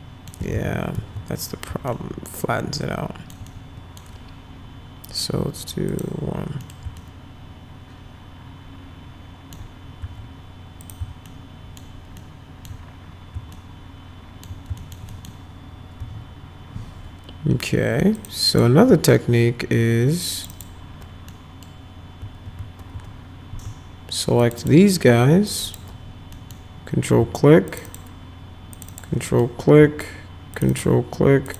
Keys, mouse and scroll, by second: 0.5 ctrl+z, 1.0 ctrl+z, 1.9-3.3 alt+middle drag, 3.5 middle click, 5.9 click, 6.6 middle click, 7.0-9.6 alt+middle drag, 10.8 click, 11.3 alt+middle click, 12.2 alt+middle click, 13.5 alt+middle click, 14.8 alt+middle click, 15.1 middle click, 16.0 F4, 18.2 click, 18.5 click, 20.3 ctrl+click, 20.5 ctrl+click, 21.3 middle click, 24.4 ctrl+click, 24.6 ctrl+click, 25.5 ctrl+click, 25.6 ctrl+click, 26.3 middle click, 27.7 ctrl+click, 27.9 ctrl+click, 28.7 ctrl+click, 28.9 ctrl+click, 29.3 middle click, 30.6 ctrl+click, 30.7 ctrl+click, 31.5 ctrl+click.